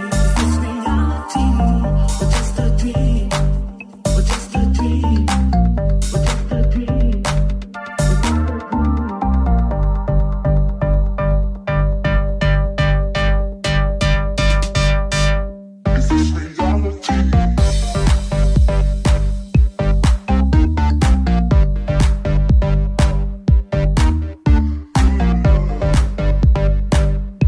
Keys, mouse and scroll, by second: 1.9 alt+shift+middle click, 2.4 alt+shift+right click, 2.4-7.2 alt+shift+middle drag, 2.6 alt+z, 3.3 g, 7.2 right click, 7.3 shift+middle click, 7.8 shift+right click, 7.8 shift+middle click, 8.7 right click, 8.8 shift+middle click, 9.3 shift+right click, 9.3-17.9 shift+middle drag, 9.6 j, 10.1 j, 11.9 g, 15.3 /, 16.2 shift+c, 16.9 KP_1, 18.2 shift+middle click, 18.6-19.8 middle drag, 19.9-22.1 ctrl+middle drag, 20.3 Tab, 24.3 Tab, 25.6 ctrl+KP_Add, 26.9 g.